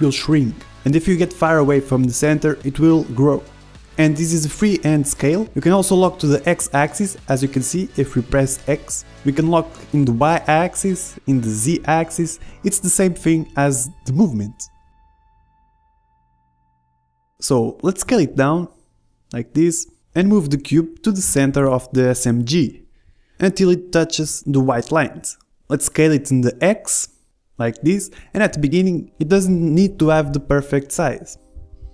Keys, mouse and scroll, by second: 11.9-13.0 middle drag, 12.4 s, 14.9 s, 16.4 KP_1, 16.9 middle click, 17.3 click, 17.3 ctrl+z, 17.9 s, 19.8 g, 21.5 s, 25.2 s, 29.9-31.5 drag, 30.6 s.